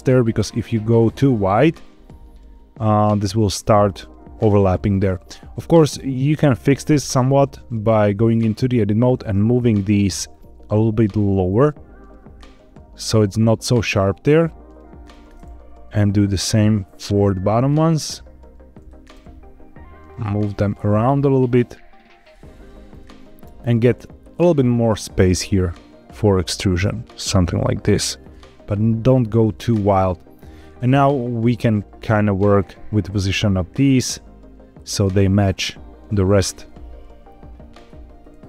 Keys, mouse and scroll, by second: 0.3 scroll up 2, 1.7-3.3 shift+drag, 4.7 scroll down 3, 5.2 shift+middle click, 6.9 Tab, 8.2 click, 9.4 shift+middle click, 10.2 shift+click, 11.1 g, 14.9 click, 16.0 click, 17.4 shift+click, 17.8 g, 18.6 click, 19.1 g, 22.1 click, 22.6 shift+middle click, 23.1-24.1 scroll up 2, 24.1 shift+scroll up 1, 24.2-28.4 shift+drag, 28.4-28.7 scroll down 2, 29.1 shift+middle click, 29.8-30.4 scroll down 2, 30.5 shift+middle click, 32.0 click, 32.8 g, 34.7 click, 36.3 click, 36.5 g, 36.6 z, 37.7 click, 38.1 click, 38.4 g.